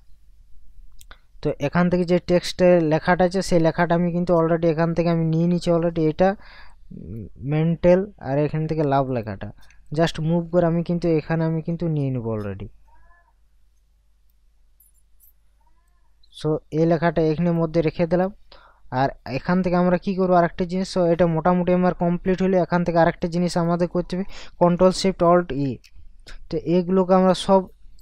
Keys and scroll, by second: 20.2 ctrl+KP_Subtract, 25.6 ctrl+alt+shift+e.